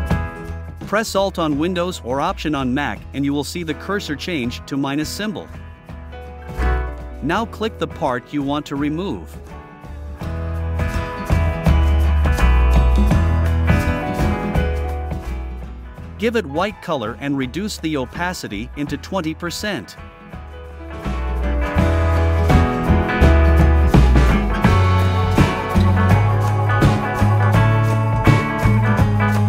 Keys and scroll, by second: 2.0 v, 6.8 shift+Up, 10.4 shift+Down, 23.1 3, 23.5 Return, 25.8 2, 26.2 Return.